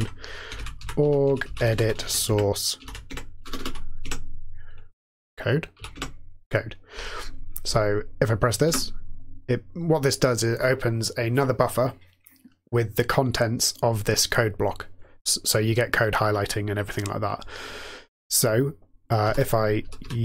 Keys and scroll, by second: 0.2-4.1 typing, 5.5-6.2 typing, 8.4-9.1 typing, 10.5-11.2 typing, 19.2-20.2 typing.